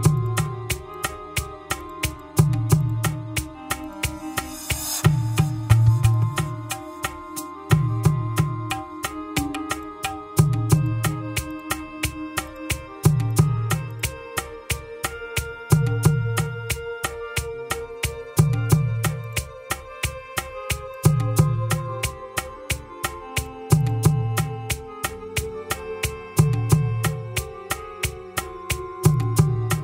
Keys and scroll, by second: 7.6 Return, 15.4 ctrl+v, 19.4 Return.